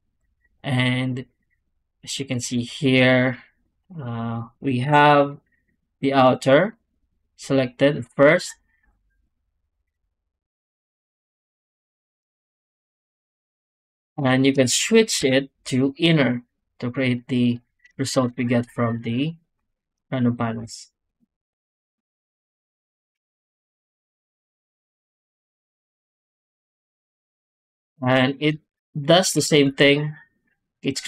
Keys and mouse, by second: 3.6 middle click, 4.7 F9, 8.7 z, 10.4 middle drag, 13.4 z, 15.1 F9, 20.5 z, 23.3 z, 25.8 z, 27.0 click, 27.5 click, 27.9 z, 28.5 click, 29.2 g.